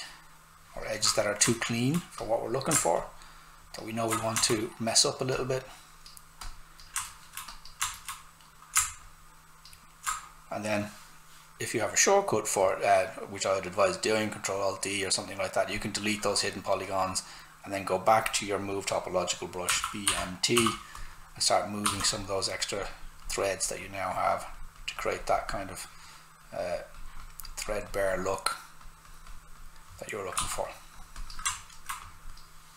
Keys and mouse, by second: 1.5 alt+right click, 2.2 click, 4.5 alt+right click, 5.3 click, 7.0 alt+right click, 7.5 click, 7.9 alt+right click, 9.0 ctrl+alt+click, 15.7 click, 19.4-21.8 typing, 20.9 click, 21.9 click, 30.3 s, 31.4 alt+click, 31.5 alt+right click, 32.0 click.